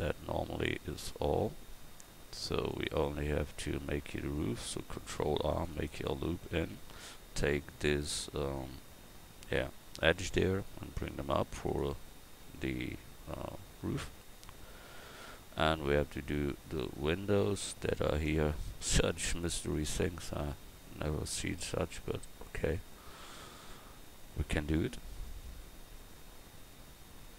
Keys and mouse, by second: 2.7 right click, 3.1 Tab, 5.0 ctrl+r, 16.0 a.